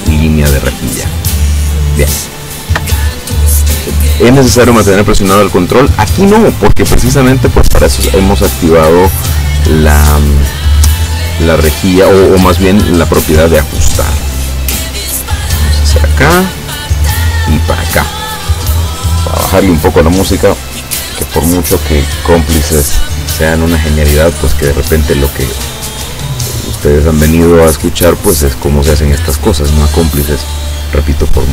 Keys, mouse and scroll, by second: 1.8 ctrl+click, 14.3 click, 16.1 click, 17.6 click, 25.1 click.